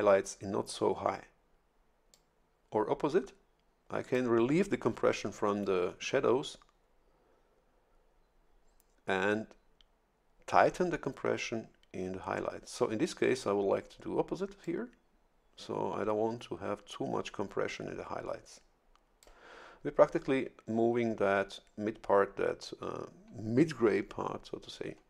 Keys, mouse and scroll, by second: 2.1-4.3 drag, 14.6-19.4 drag.